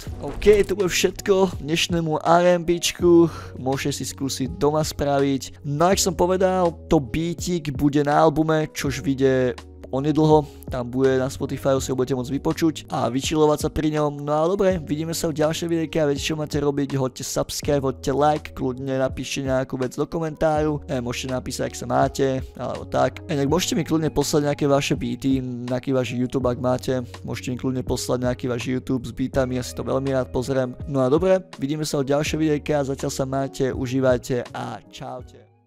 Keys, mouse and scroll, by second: 0.0 click.